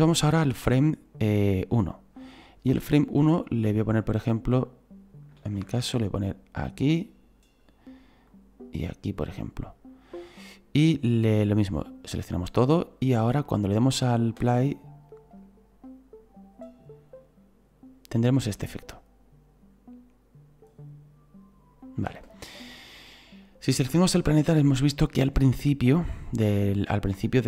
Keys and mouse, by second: 0.1 click, 3.3 click, 4.6 click, 6.3 click, 8.3 click, 11.8 click, 13.3 right click, 14.4 space, 22.1 space, 23.4 right click, 25.2 click.